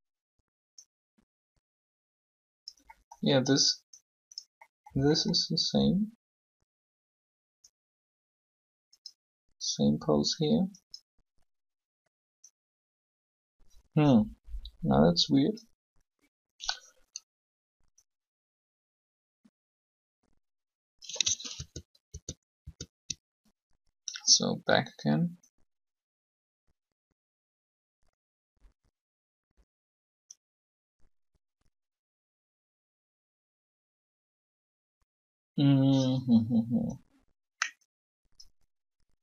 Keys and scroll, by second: 21.5 ctrl+z, 23.4 ctrl+z.